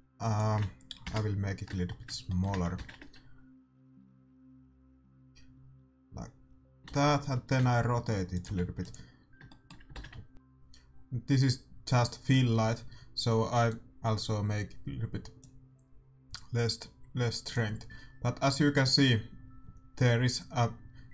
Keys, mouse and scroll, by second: 1.0 KP_0, 1.2 click, 1.6-4.3 middle drag, 4.0 shift+z, 7.0 shift+z, 7.5 r, 8.4 g, 9.4 middle click, 14.2-16.1 drag, 18.0-19.8 drag.